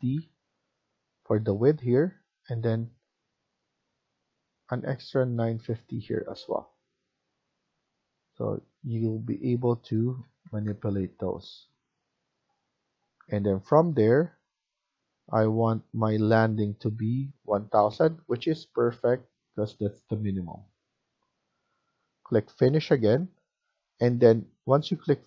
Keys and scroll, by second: 0.0-0.3 typing, 9.9-11.0 typing, 13.2 Escape, 13.5 Escape.